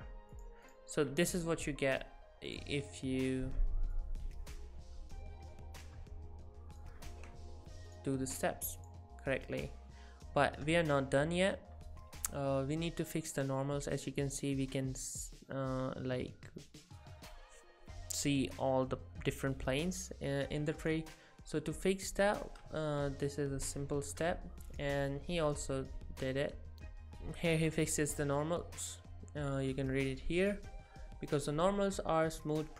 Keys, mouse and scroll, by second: 21.8 click, 22.5 middle click.